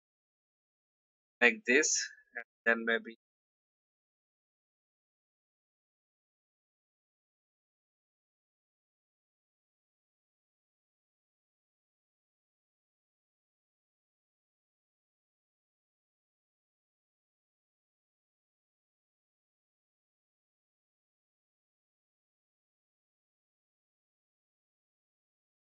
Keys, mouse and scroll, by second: 9.8 ctrl+c, 10.7 click, 11.3 ctrl+v, 13.4 shift+click, 14.7 shift+v, 15.4 shift+click, 16.5-17.8 drag, 18.4-20.1 alt+drag, 20.7 ctrl+r, 21.7 click, 22.5 shift+click, 23.6 click.